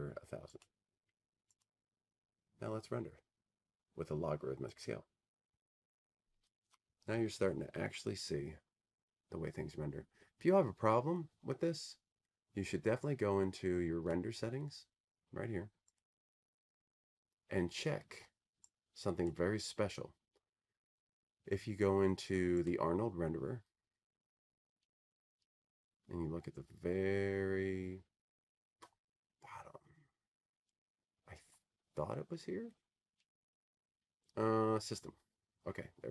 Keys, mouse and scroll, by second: 2.8-5.6 drag, 7.0 click, 16.0 click, 18.0 click, 21.2 click, 24.8 click, 26.1-26.6 scroll, 27.0-29.3 scroll down 22, 29.3 scroll down 1, 31.5 scroll up 5, 33.5 scroll up 2, 33.8 scroll, 34.4-35.8 scroll, 35.8-36.1 scroll.